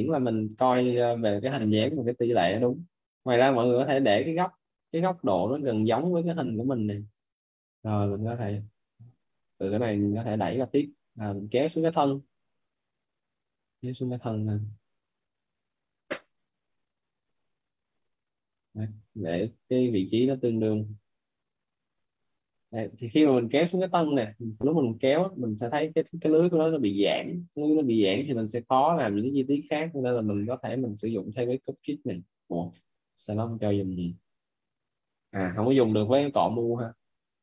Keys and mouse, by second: 1.0 right click, 2.1 right click, 3.8 right click, 4.7 right click, 7.8 click, 9.0 right click, 11.9 click, 14.1 click, 16.8 alt+right click, 18.9 click, 25.5 shift+f, 28.7 shift+f, 31.2 click, 32.8 right click.